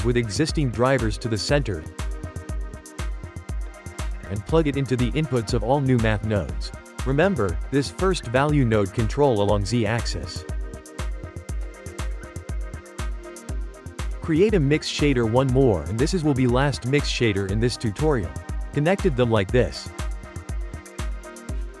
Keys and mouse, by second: 0.1 shift+middle click, 1.0 g, 1.9-4.3 shift+middle drag, 4.3 click, 6.1 click, 8.4 click, 10.4 click, 11.2 x, 11.6-13.2 ctrl+middle drag, 13.2 shift+a, 17.6-18.9 shift+middle drag, 18.9 click, 20.0-21.8 shift+middle drag.